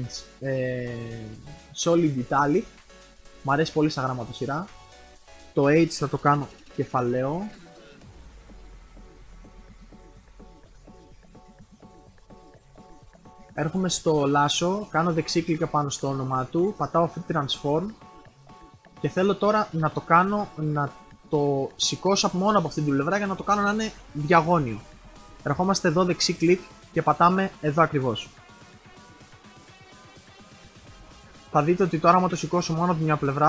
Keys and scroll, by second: 6.6 shift+h.